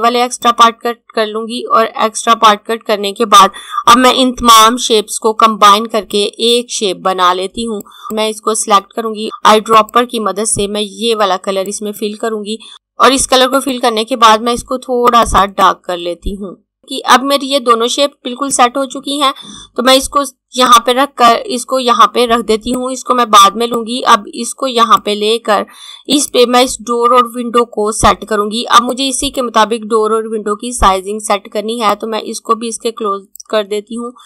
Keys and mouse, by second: 5.2 click, 9.6 click, 18.6 click, 28.6 click, 31.6 click.